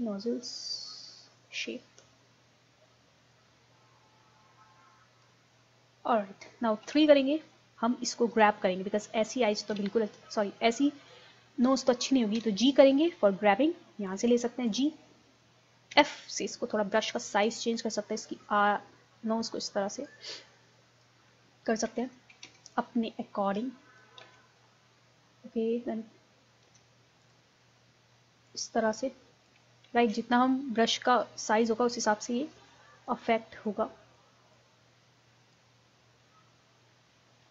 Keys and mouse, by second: 6.0 middle click, 6.9 KP_3, 9.7 KP_3, 10.5-12.4 middle drag, 12.4 g, 14.1-15.9 drag, 15.9 f, 17.1-19.5 drag, 20.4-22.1 drag, 22.1 ctrl+z, 22.5 ctrl+z, 24.3 ctrl+z, 26.7 f, 27.3-30.0 drag, 30.0 ctrl+z, 30.4 middle click, 31.3-32.9 drag, 33.7-35.9 drag, 35.9-37.5 middle drag.